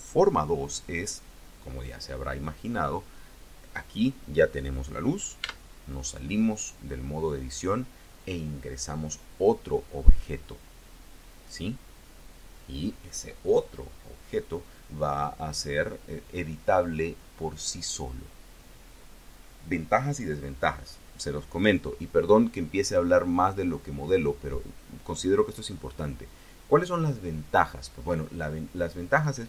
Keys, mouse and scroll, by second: 5.3 Tab.